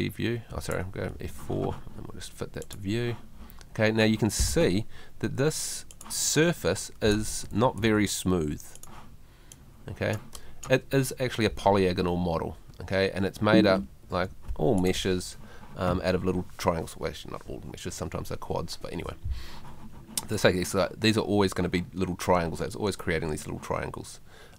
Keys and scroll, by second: 7.2 Escape, 13.4 Escape.